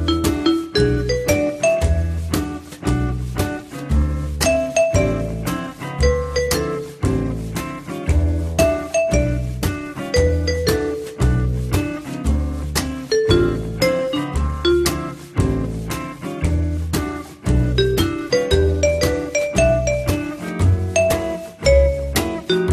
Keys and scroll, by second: 11.3 2.